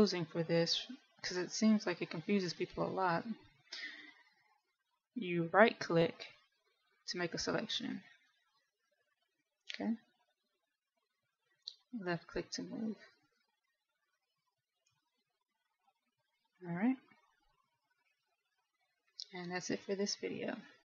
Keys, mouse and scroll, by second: 1.8 right click, 3.2 middle click, 5.7 middle click, 7.4 right click, 10.7 click, 17.7 middle click, 19.7 a.